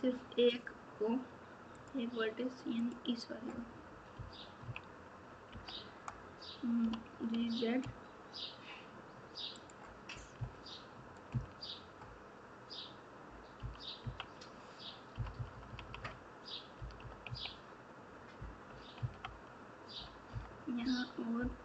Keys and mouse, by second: 2.8 click, 4.1 KP_2, 5.5 KP_3, 10.3 KP_2, 11.3 KP_2, 13.5 KP_6, 14.0 KP_3, 15.1 KP_6, 15.3 KP_6, 15.5 KP_6, 20.3 KP_9.